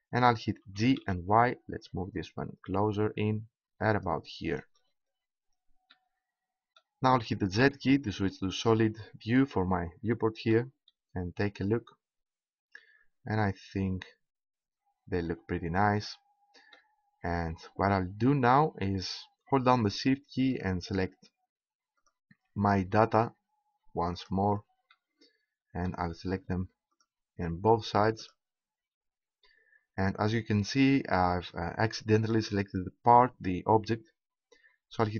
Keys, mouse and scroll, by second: 0.6 g, 4.1-5.9 drag, 7.6 z, 10.1-11.1 middle drag, 20.5-23.8 right drag, 24.1-26.5 right drag, 26.9-29.9 right drag.